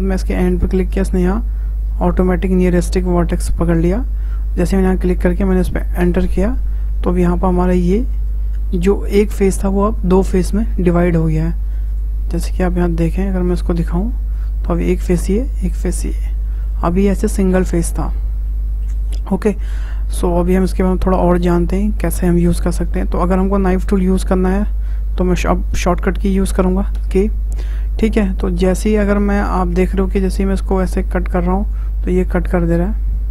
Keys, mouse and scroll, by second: 6.8-9.8 middle drag, 11.9 click, 12.4 click, 13.5 click, 15.5 click, 16.1-17.1 middle drag, 17.1 click, 18.5-20.0 middle drag, 20.0 `, 21.3-22.7 shift+middle drag, 22.7 ctrl+z, 23.4 ctrl+z, 26.9 k.